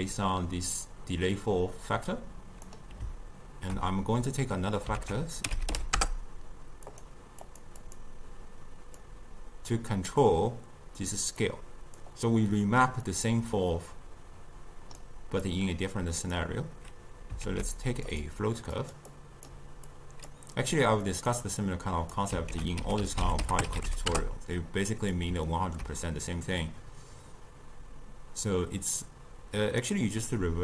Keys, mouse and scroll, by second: 5.1 ctrl+a, 7.5 click, 7.9-10.9 drag, 11.5 click, 13.1 click, 15.5-17.5 drag, 17.5 ctrl+a, 18.9 click, 19.2-20.0 drag, 21.2 click, 21.7 click, 22.6 ctrl+a, 25.6-26.7 ctrl+middle drag, 26.7-29.9 drag.